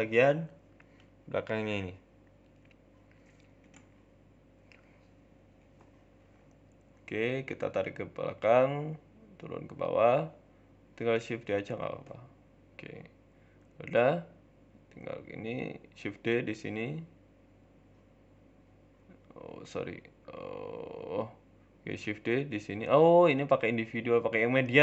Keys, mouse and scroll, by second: 0.2 Tab, 0.5 click, 1.6 click, 1.6 right click, 2.1 shift+middle click, 2.4 z, 3.3 shift+middle click, 3.7 shift+d, 4.6 ctrl+z, 4.8 Tab, 5.2 a, 5.8 shift+d, 7.3 g, 8.0 s, 8.6 middle click, 9.1 g, 9.8 z, 10.3 shift+middle click, 10.6 scroll up 6, 10.9 shift+middle click, 11.4 g, 12.9-13.3 scroll down 4, 13.1 Tab, 13.3 middle click, 13.7 KP_7, 13.9 Tab, 14.2 z, 15.1 scroll up 1, 15.3 shift+middle click, 15.8 shift+d, 16.8 shift+s, 18.3 shift+d, 19.7 middle click, 20.1 ctrl+z, 20.3 ctrl+z, 20.8 KP_7, 21.9 shift+d, 21.9 s, 23.0 click, 24.2 s.